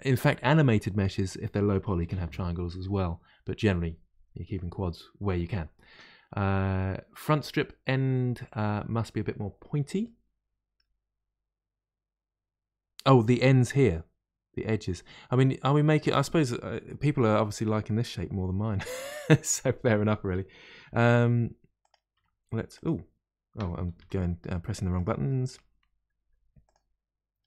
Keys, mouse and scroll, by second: 10.0-13.0 middle drag, 16.0-21.0 middle drag, 21.3 2, 21.8 click, 22.1 2, 22.7 click, 23.5 Tab, 23.9 2, 24.3 middle click, 24.9 click, 25.2 middle click, 26.2 g.